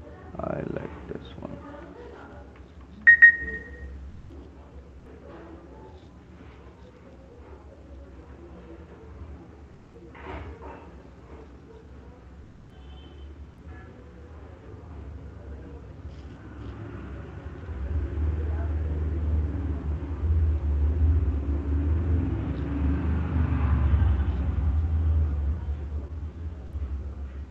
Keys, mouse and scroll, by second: 0.3 click, 1.6 click, 2.6 [, 3.1 [, 3.2 [, 7.1 click, 7.7 click, 7.9 click, 8.8 click, 9.7 click, 11.3 click, 11.8 click, 12.4 click, 12.6 click, 13.1 click, 14.1 click, 14.9 click, 15.3 click, 15.7 click, 15.9 click, 18.6 click, 19.4-20.0 click, 19.8 click, 20.2 click, 21.5 click, 22.4 click, 24.6 click, 25.2 click, 25.5 click, 26.2 click, 27.4 click.